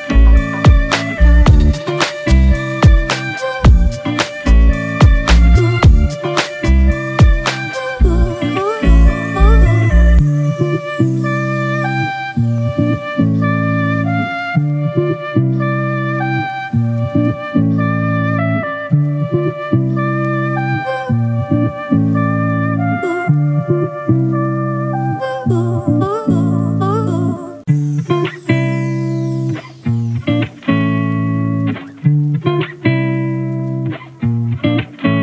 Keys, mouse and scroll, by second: 17.8 ctrl+click, 18.8 ctrl+e, 31.6 scroll down 1.